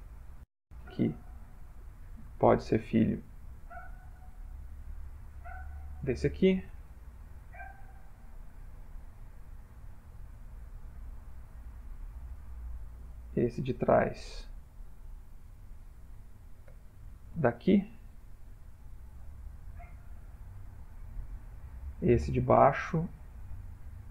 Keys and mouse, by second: 1.3 middle click, 2.4 ctrl+middle click, 3.4 middle click, 5.5 shift+click, 6.8 ctrl+p, 10.1 shift+middle click, 11.4 click, 12.1 click, 13.5 middle click, 14.1 click, 15.4 shift+click, 16.7 ctrl+p, 20.0 shift+middle click, 21.4 middle click, 22.6 click.